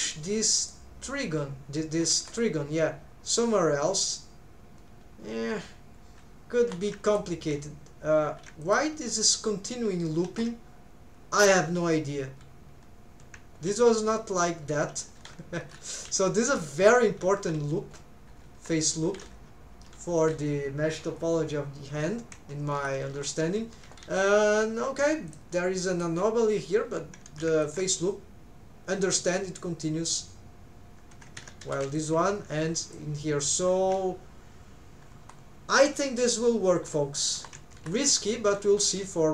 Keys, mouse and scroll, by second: 10.3-11.7 middle drag, 37.8-39.3 middle drag.